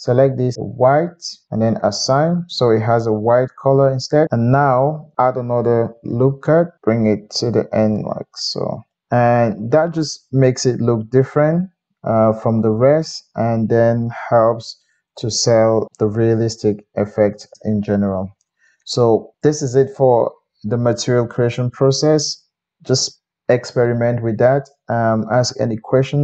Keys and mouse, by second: 5.7 ctrl+r, 9.0 Tab, 9.0-16.3 middle drag, 16.3 click, 16.4-26.2 middle drag.